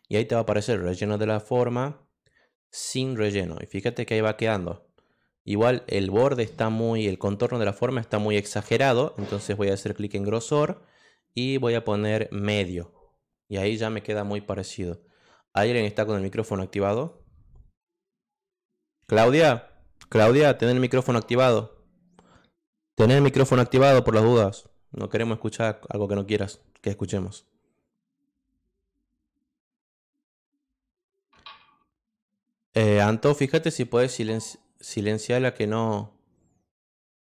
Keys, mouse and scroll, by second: 0.6 click, 3.1 click, 7.1 click, 10.1 click, 12.6 click, 13.4 click, 16.9 click, 25.2 click.